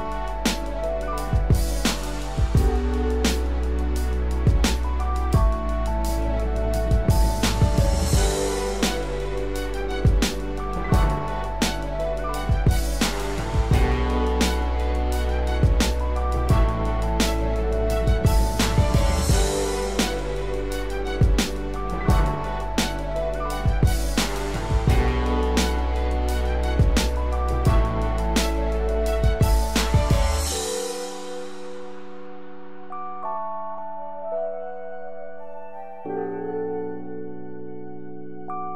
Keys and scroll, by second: 30.0 ctrl+=.